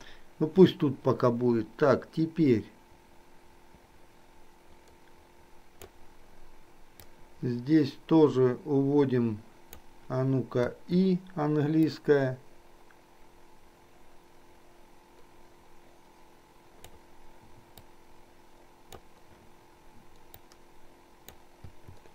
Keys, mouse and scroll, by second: 7.0-10.0 drag, 10.9 i, 11.9-17.1 drag, 18.0-19.1 drag, 20.6-21.6 drag, 21.7 i.